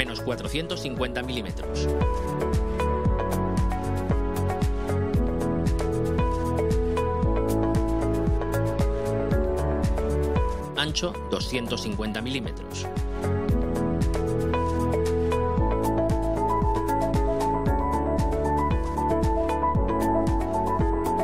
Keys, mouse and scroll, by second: 0.6 BackSpace, 2.0-3.3 typing, 3.7 Return, 5.0-6.2 drag, 8.5 scroll up 1, 9.8 click, 11.5-12.9 typing, 15.2 Return, 20.8 click.